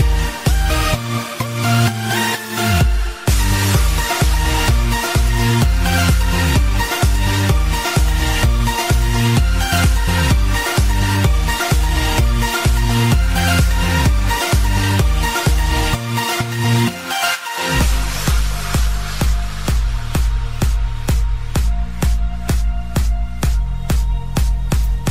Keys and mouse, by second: 0.3 click, 1.1 click, 1.7 KP_0, 2.0 Return, 3.1 Page_Down, 3.1 Return, 3.1 KP_0, 3.4 Page_Down, 5.1 Page_Down, 5.3 click, 5.8 click, 6.5 KP_8, 6.7 KP_0, 7.0 Return, 8.1 Page_Down, 8.1 Return, 8.1 KP_0, 8.4 Page_Down, 9.5 Page_Down, 9.5 click, 10.1 KP_0, 10.4 Return, 10.4 click, 10.4 KP_0, 12.2 click, 12.6 click, 12.6 u, 14.2 click, 15.9 right click, 17.1 click, 17.1 right click, 18.1 click, 19.3 click, 19.7 space, 21.6 click, 22.2 click, 23.4 click.